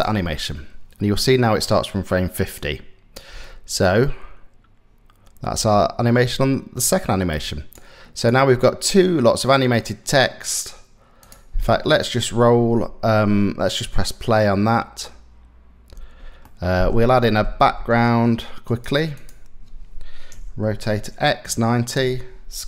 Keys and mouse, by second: 2.2 click, 2.9 space, 5.1 space, 5.9-7.4 drag, 8.5 click, 9.4-10.8 middle drag, 10.8-11.8 drag, 11.8-13.4 middle drag, 13.4 space, 15.6 space, 16.1 click, 17.2 shift+a, 19.9 r, 22.2 s.